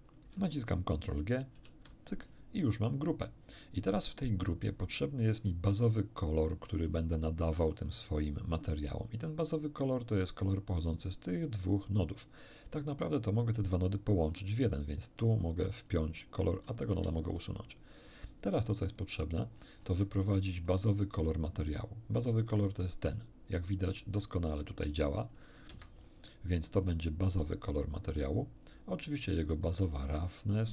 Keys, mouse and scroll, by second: 1.6 ctrl+g, 4.2-5.8 middle drag, 9.6-11.2 drag, 11.5 click, 12.9-13.7 drag, 14.7-16.0 drag, 16.8 click, 16.9 x, 17.8-18.3 drag, 19.0 click, 19.5 middle click, 20.4 middle click, 21.2 click, 22.3-26.2 drag, 25.7 Escape, 27.2-28.4 drag, 29.6-30.7 drag.